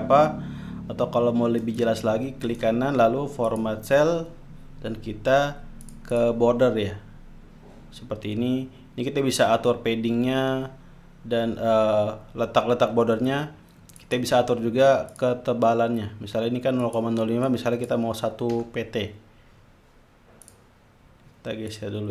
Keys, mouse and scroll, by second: 1.6 right click, 3.5-4.0 drag, 5.8-6.9 drag, 14.0 click, 15.1 click, 16.8 click, 17.4 click, 18.5 1, 20.4 click, 21.7 click.